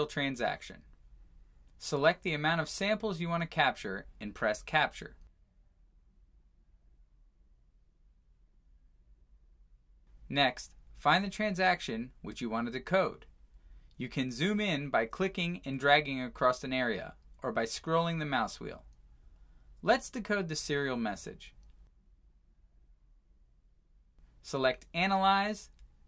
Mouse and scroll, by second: 1.8 click, 13.2 scroll, 15.7 click, 16.9 scroll, 18.0 scroll, 18.1 click, 21.0 middle click, 21.3 middle click, 21.5-22.0 scroll, 24.1 scroll, 24.6 click.